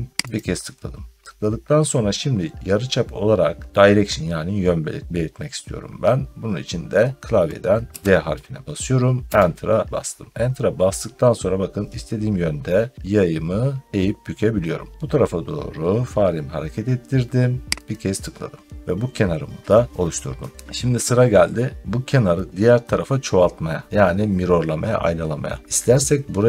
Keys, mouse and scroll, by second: 0.2 click, 2.0-2.4 scroll, 2.6 middle click, 2.8 middle click, 3.0 scroll down 3, 3.6 scroll down 1, 7.8 d, 9.2 Return, 10.7-11.1 scroll, 17.7 click, 18.7-19.8 scroll, 19.9 scroll down 2, 20.7 scroll up 2, 21.4 scroll up 1, 25.6 scroll down 1.